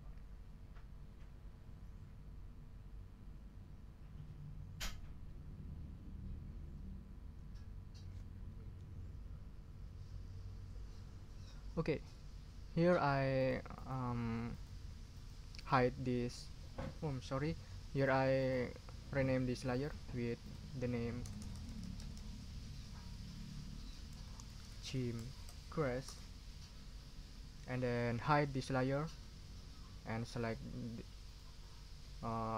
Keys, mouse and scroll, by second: 13.4 click, 13.7 click, 14.5 click, 15.1 click, 15.6 click, 17.9 click, 18.4 click, 19.7 click, 20.4 click, 21.2 BackSpace, 23.2 Left, 24.2-25.9 typing, 26.0 Return, 28.9 click, 31.2 click.